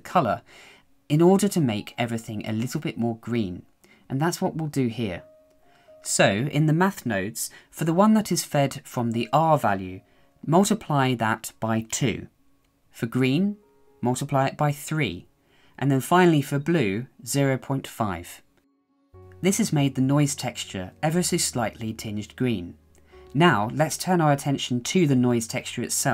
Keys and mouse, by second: 6.2-12.4 drag, 15.9-17.7 drag, 17.7-21.6 middle drag, 22.4 KP_1, 23.4 middle click, 25.8-26.1 drag.